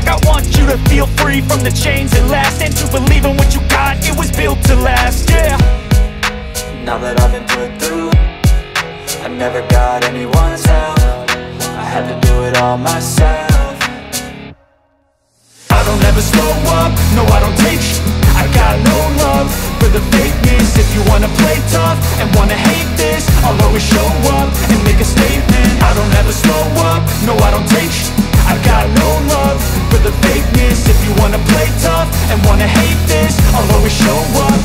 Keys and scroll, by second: 7.6 alt+space, 10.5 alt+space, 22.3 ctrl+alt+z, 22.8 space, 24.0 space, 24.9 [, 25.0 [, 34.4 ].